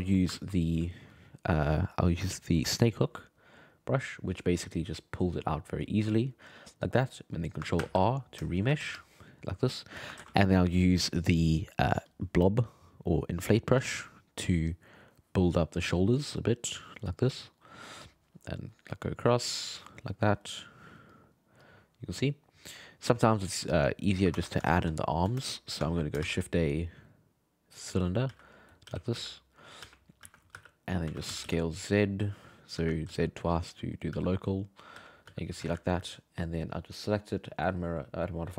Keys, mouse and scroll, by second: 0.1 middle click, 2.6-6.4 drag, 6.4-7.8 middle drag, 7.8 ctrl+r, 8.5 shift+middle click, 8.6 g, 8.8 f, 9.3 click, 10.2 ctrl+z, 12.1-13.7 drag, 13.7 f, 14.4-15.6 drag, 15.6 middle click, 16.1-17.6 drag, 17.6 middle click, 18.0-19.4 drag, 19.4 middle click, 19.8-21.1 drag, 21.1 middle click, 21.6 click, 22.3 middle click, 22.8 click, 23.3 middle click, 23.7 click, 24.3 ctrl+Tab, 24.7 alt+a, 25.4-26.2 shift+middle drag, 26.2 shift+a, 28.3-31.1 typing, 32.8 g, 34.1 g, 34.9 r, 35.3 g, 35.6 alt+a, 36.4 right click, 37.3-38.5 drag.